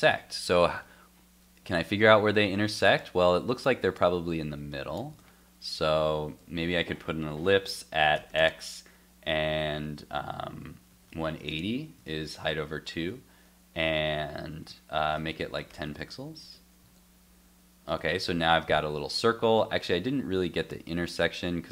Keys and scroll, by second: 1.8 alt+Tab, 5.1 super+Tab, 6.4 alt+Tab, 12.0 super+s, 16.0 super+s, 16.4 super+Tab, 16.9 super+r, 20.2 alt+Tab.